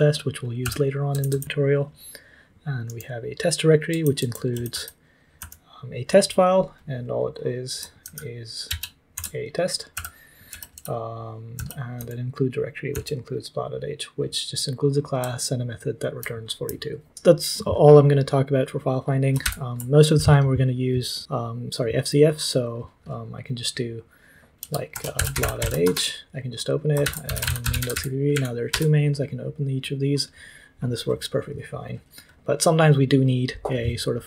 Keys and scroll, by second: 0.3-5.4 typing, 8.0 ctrl+p, 8.6 ctrl+c, 8.6 typing, 9.1 ctrl+t, 9.7-12.9 typing, 15.2-16.1 typing, 19.4 ctrl+p, 24.6-28.4 typing, 28.7 Return.